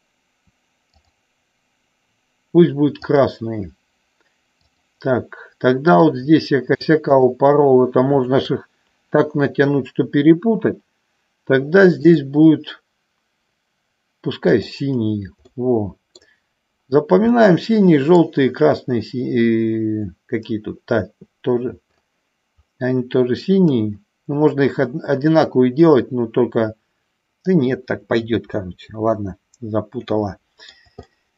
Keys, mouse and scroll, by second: 3.0 click, 4.6 click, 7.2 shift+click, 8.2 shift+click, 14.5 click, 15.6 middle click, 17.4 middle click, 30.2 middle click, 31.1 shift+middle click.